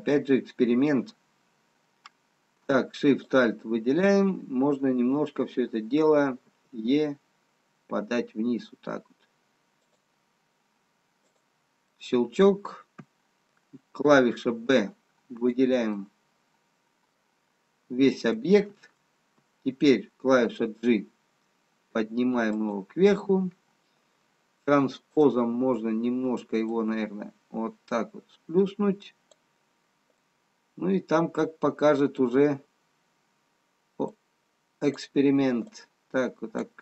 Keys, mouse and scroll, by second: 3.2 alt+shift+click, 6.7 e, 11.7 click, 12.6 middle click, 15.2 b, 16.2 middle click, 22.2 g, 25.1 click, 30.7 middle click, 36.6 click.